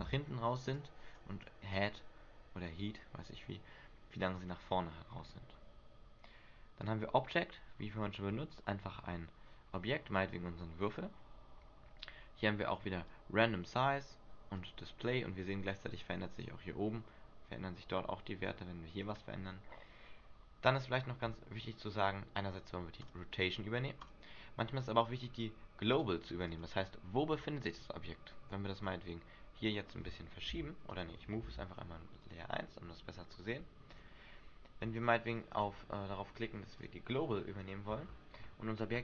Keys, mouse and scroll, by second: 0.1 alt+a, 0.9 click, 1.9 click, 5.8-7.0 scroll down 1, 7.0 click, 13.2 click, 14.7 click, 18.1 click, 23.3 click, 24.2 click, 26.1 click, 26.7 click, 28.9 click, 29.7 right click, 30.7 g, 31.2 right click, 31.6 m, 34.1 click, 35.1 right click, 35.7 right click, 37.0 click, 38.1-38.6 scroll down 6.